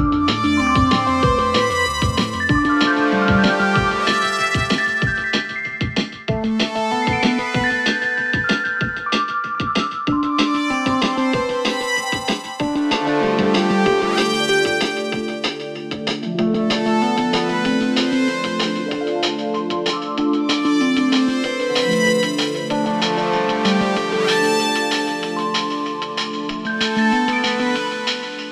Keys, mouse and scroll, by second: 0.1 alt+scroll down 1, 0.5 space, 0.6-1.1 click, 0.9 space, 1.3-1.6 alt+scroll up 1, 1.8 space, 1.9 click, 2.2 space, 4.7-11.4 drag, 13.5-22.0 drag, 24.6 click, 25.7-26.3 alt+scroll down 2, 26.3-26.8 scroll up 2, 26.8-28.5 drag.